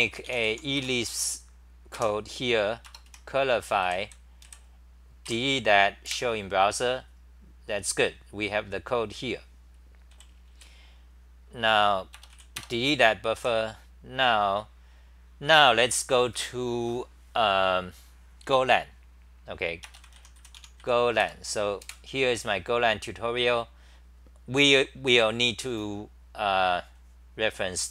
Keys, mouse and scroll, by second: 0.8 Return, 1.9 k, 3.9 d, 5.3 i, 6.1 super+r, 9.9-10.6 typing, 13.4 w, 21.3 Return, 21.8 super+r.